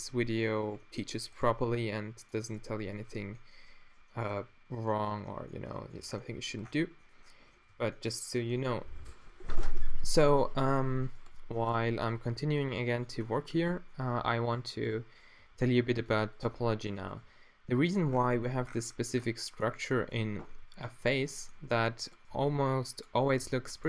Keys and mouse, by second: 0.1 g, 0.9-2.6 drag, 1.5 g, 2.5 g, 3.2-4.9 middle drag, 4.5 g, 5.0-5.7 middle drag, 6.1 Tab, 7.7 a, 10.0 Tab, 12.1 g, 13.1-15.4 drag, 15.4 g, 16.0-16.5 drag, 16.5 g, 17.2 g, 18.1-20.4 middle drag, 22.4 g, 23.5 g.